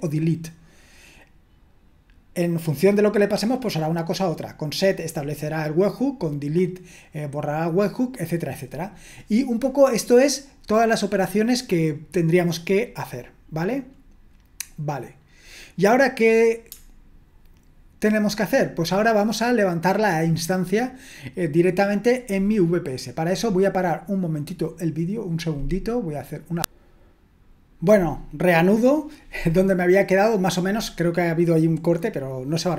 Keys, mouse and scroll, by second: 26.4 click.